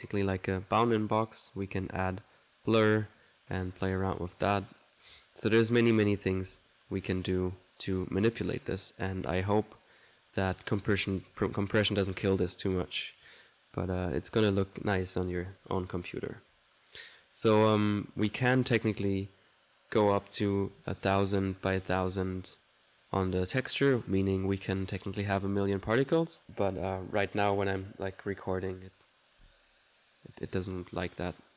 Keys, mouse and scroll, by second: 1.0 click, 1.9 click, 3.1 click, 4.0-5.2 drag, 6.8 ctrl+z, 6.8 ctrl+click, 7.2 ctrl+middle click, 7.6 ctrl+click, 8.8 click, 21.6 click, 22.9-24.5 middle drag, 24.5 click, 24.9 right click.